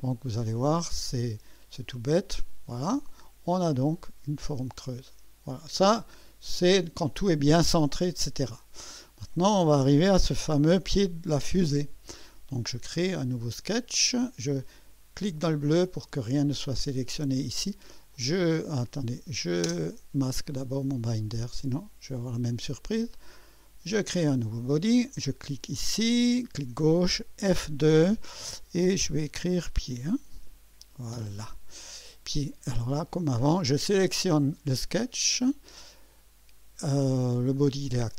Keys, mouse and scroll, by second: 1.0 click, 1.4-1.8 typing, 3.1 typing, 3.1-5.5 drag, 6.1 click, 8.9 scroll up 1, 10.4 typing, 11.0-11.8 right drag, 15.5 click, 18.1 click, 19.6 space, 19.8 space, 21.4 click, 23.3 click, 25.9 click, 27.4 F2, 29.0-30.8 typing, 31.1 Return, 31.3 Return, 33.1-33.9 typing, 34.7 click.